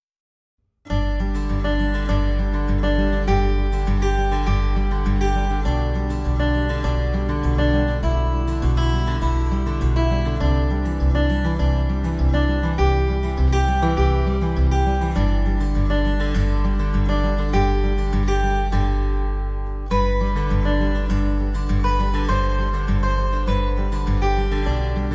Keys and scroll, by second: 4.7 ctrl+j, 5.1 ctrl+l, 6.4 ctrl+l, 6.6 ctrl+t, 22.9-25.1 typing.